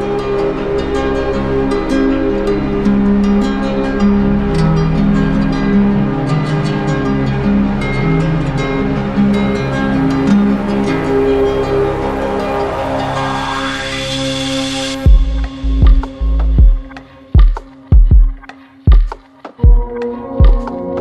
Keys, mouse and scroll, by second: 5.5 click, 14.0-15.1 drag, 20.0-21.0 drag.